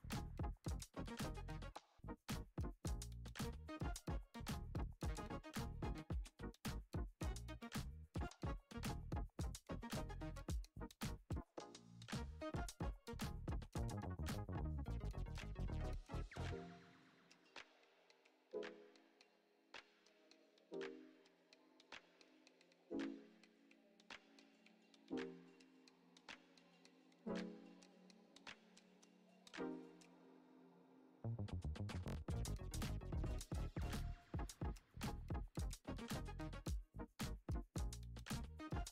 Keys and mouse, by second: 1.7 shift+d, 3.6 shift+d, 5.5 ctrl+Tab, 6.4 right click, 7.1 middle click, 8.1 click, 9.0 click, 9.7-10.8 drag, 11.1 click, 11.9 click, 12.8 shift+middle drag, 14.1 Tab, 15.4 shift+middle click, 16.1 click, 17.6 shift+click, 18.6 shift+click, 19.0 shift+middle click, 19.6 e, 20.5 ctrl+z, 21.1 shift+d, 22.7 shift+middle click, 23.5 e, 25.8 click, 26.9 s, 29.0 middle drag, 29.8 i, 31.0 e, 32.5 s, 33.5 i, 35.6 ctrl+Tab, 36.4 middle click, 36.8 Tab, 37.3 click, 37.6 l, 37.8 l, 38.2 l.